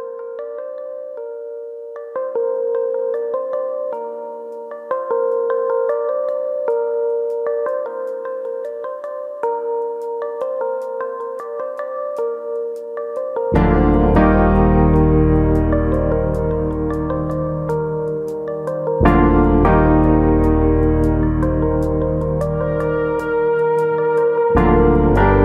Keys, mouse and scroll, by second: 0.2 right click, 0.6 click, 0.9 middle click, 1.1 shift+middle click, 1.3 middle click, 1.8 click, 2.8 middle click, 3.6 middle click, 4.3 middle click, 5.4 middle click, 5.9 scroll down 3, 6.2 middle click, 6.5-7.1 scroll up 2, 7.1 click, 7.5 shift+click, 7.8 middle click, 8.2 click, 9.1 click, 9.5 shift+click, 9.6 shift+click, 10.2 click, 11.1 middle click, 11.9 click, 12.1 middle click, 13.4 click, 14.1 middle click, 14.5 shift+middle click, 15.1 click, 15.7 middle click, 16.3 click, 17.0 middle click, 17.7 click, 18.6 shift+click, 19.1 click, 20.8 middle click, 20.8 click, 21.0 middle click, 22.5 KP_3, 23.8 click, 25.3 click.